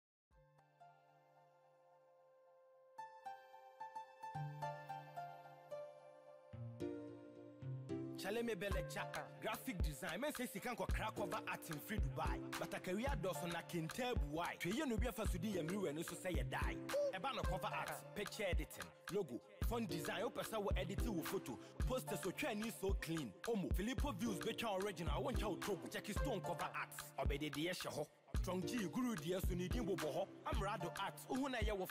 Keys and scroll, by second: 15.3 shift+F6, 20.7 ctrl+shift+i, 23.6 Delete, 26.3 ctrl+d.